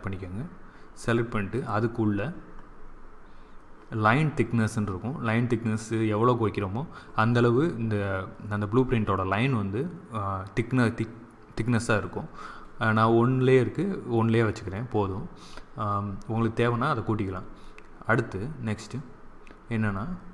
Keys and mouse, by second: 0.8-7.0 middle drag.